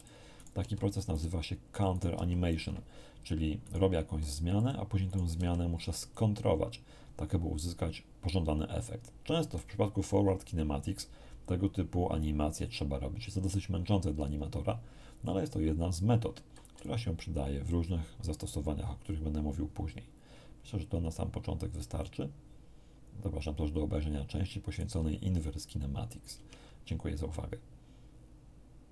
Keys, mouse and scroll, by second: 0.3 right click, 0.6 r, 1.1 click, 1.9 right click, 2.1 r, 2.5 click, 3.6 right click, 3.9 r, 4.5 click, 5.1 right click, 5.3 r, 6.0 click, 16.7 d, 16.8-24.9 right drag, 26.3 ctrl+Tab.